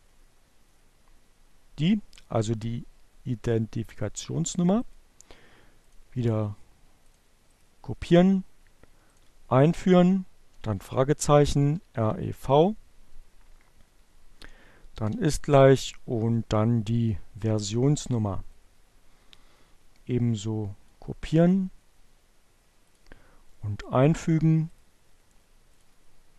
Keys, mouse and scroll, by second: 2.5-4.2 right drag, 4.7 click, 6.0 click, 6.4 right click, 8.0 click, 9.9-10.8 typing, 12.6 shift+0, 17.5-20.1 drag, 20.3 right click, 21.8 click, 23.2 click, 23.4 right click, 24.6 click, 25.4 Return.